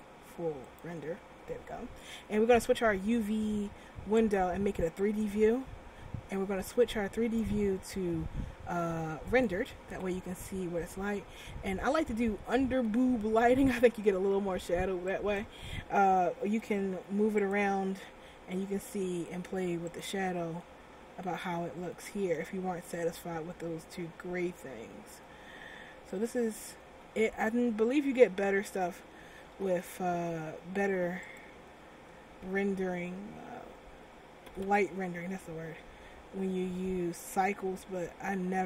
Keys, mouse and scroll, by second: 0.0 click, 4.3 click, 7.2 click, 10.5 scroll down 2, 12.4 middle click, 15.3 right click, 16.7 r, 19.0 r, 20.2 click, 21.1 middle click, 22.0 middle click, 22.9 r, 27.6 ctrl+z, 28.8 middle click, 29.7 g, 33.1 ctrl+z, 34.6 r.